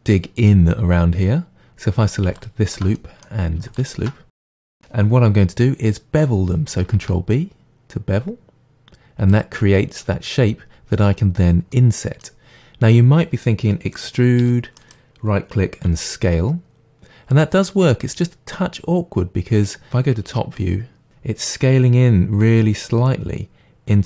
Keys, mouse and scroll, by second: 2.4 alt+click, 2.9 middle click, 3.8 alt+shift+click, 4.4-9.3 middle drag, 6.9 ctrl+b, 9.3 click, 11.7-12.5 drag, 11.7 middle click, 12.5-14.4 middle drag, 12.5-14.4 scroll up 1, 14.4 e, 14.9 right click, 15.9 s, 17.4 click, 17.7-19.7 middle drag, 21.1-24.0 scroll up 2.